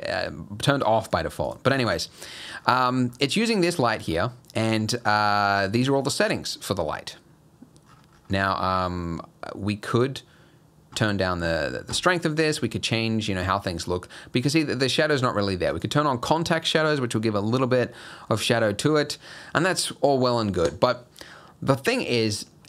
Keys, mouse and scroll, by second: 1.0 click, 1.5 click, 2.4 scroll up 2, 2.6-3.8 scroll down 10, 3.8-4.4 scroll up 8, 5.1 scroll up 2, 5.4 scroll down 3, 6.5 scroll down 4, 7.9-8.2 scroll down 11, 10.0 click, 13.7-15.7 scroll up 1, 15.7 click, 16.8 scroll up 2, 17.9 scroll down 4, 18.3 middle click, 19.3 middle click, 19.6-20.0 scroll up 1.